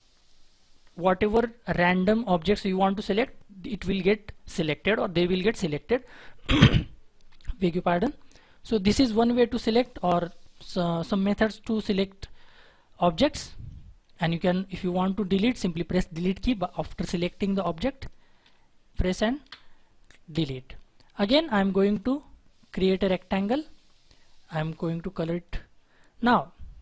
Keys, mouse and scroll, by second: 9.3-10.1 scroll down 1, 11.7 shift+F4, 16.1 Delete, 17.2 Delete, 18.4 Delete, 19.4 Delete.